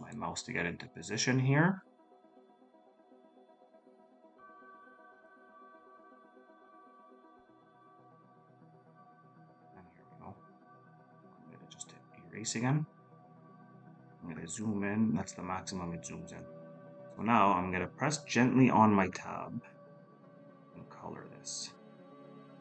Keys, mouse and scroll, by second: 14.1-15.2 scroll up 1.